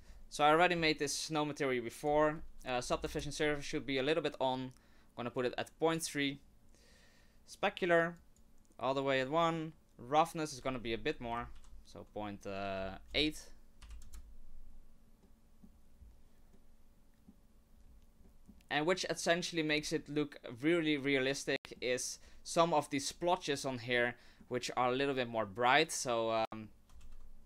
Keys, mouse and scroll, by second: 2.0 click, 5.9 middle click, 6.8-7.3 scroll up 1, 8.1 click, 9.2 middle click, 10.5 click, 14.7-15.0 scroll down 1, 15.2 middle click, 19.7-21.7 scroll up 3, 21.7 middle click.